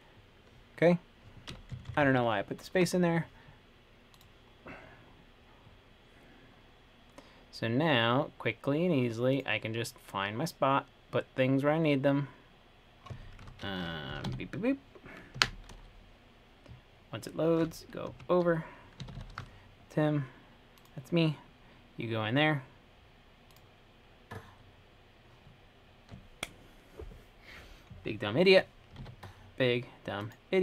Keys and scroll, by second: 1.4 typing, 2.0 Left, 2.1 Left, 2.3 Left, 2.4 Left, 3.0 typing, 14.1-15.0 typing, 15.6 Right, 18.3 Right, 19.0-19.9 typing, 29.3 super+w.